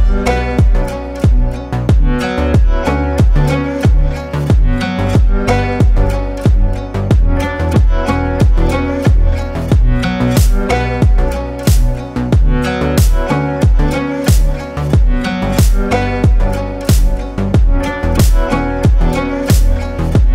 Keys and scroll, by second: 12.6 ctrl+space, 13.6 ctrl+space, 19.0 ctrl+z, 19.7 ctrl+z.